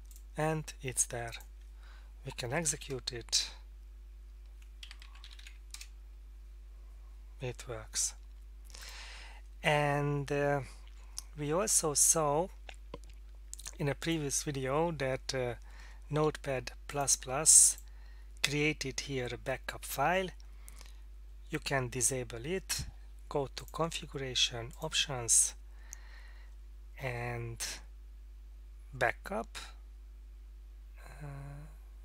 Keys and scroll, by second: 2.4 typing, 3.3 Return, 4.6-5.4 typing, 5.5 Tab, 5.9 Return.